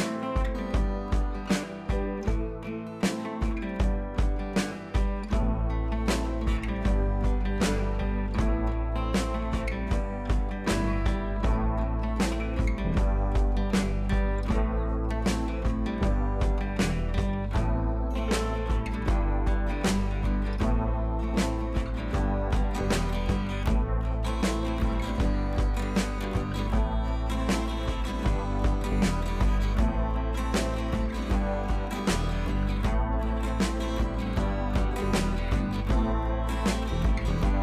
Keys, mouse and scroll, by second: 7.7-9.2 drag, 10.9-11.2 click, 12.6-13.0 click, 16.9 ctrl+t, 17.4 click, 19.3-19.8 scroll down 1, 19.9 ctrl+z, 21.1 click, 22.6-23.1 click, 26.8-27.1 drag, 29.9-34.7 drag, 35.5-37.6 drag.